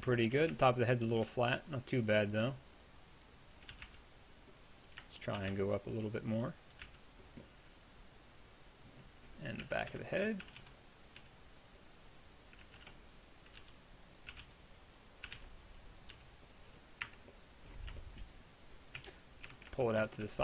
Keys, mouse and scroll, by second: 0.5 Tab, 3.7 g, 5.4 g, 9.6-11.2 typing, 12.6-16.2 typing, 17.1 Tab, 19.0 KP_1, 19.5 Tab, 20.3 a.